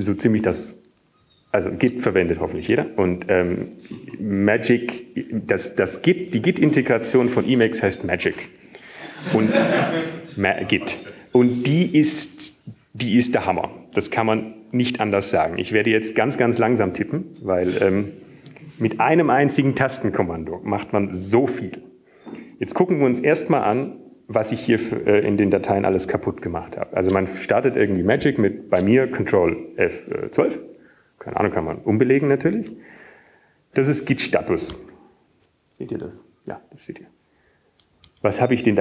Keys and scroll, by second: 29.8 ctrl+F12, 37.5 typing.